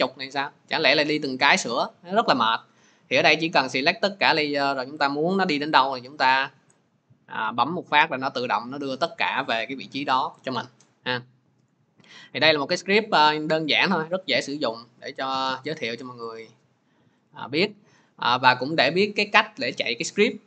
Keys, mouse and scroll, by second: 5.0 click, 12.5 click, 13.5 click, 14.6 click, 18.6 click.